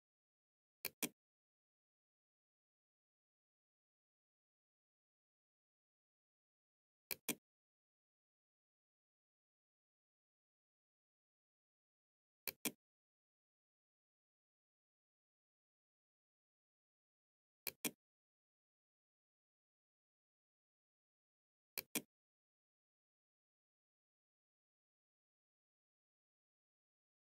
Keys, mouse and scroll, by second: 2.6 Tab, 6.0 click, 7.8 2, 8.0 x, 8.8 space, 11.5 click, 16.5 click, 20.8 click, 26.2 click.